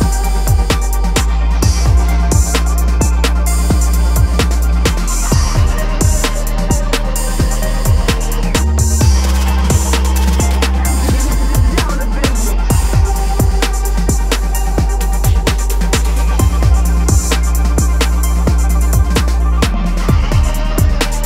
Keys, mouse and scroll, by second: 10.9 click, 12.8 shift+d, 15.0-16.1 drag, 17.8-18.1 drag, 18.1-20.4 middle drag, 20.4 click.